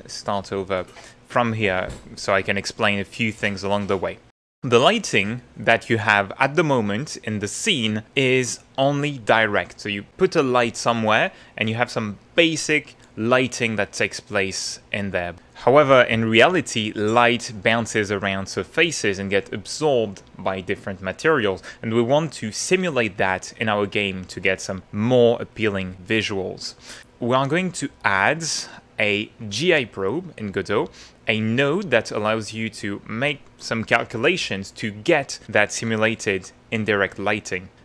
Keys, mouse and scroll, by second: 0.7-1.7 middle drag, 1.8 shift+middle click, 2.8-3.9 shift+middle drag, 27.0 click.